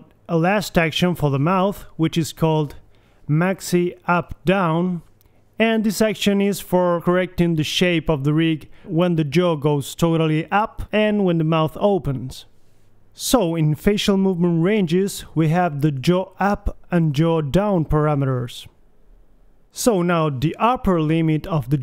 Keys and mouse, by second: 0.7 middle click, 1.2 KP_1, 3.9 click, 8.2 middle click, 8.8-11.7 drag, 9.6 KP_3, 11.3 r, 13.8 click, 14.1 right click, 15.2 right click, 15.9-17.2 middle drag, 17.2 right click, 17.5-21.8 middle drag.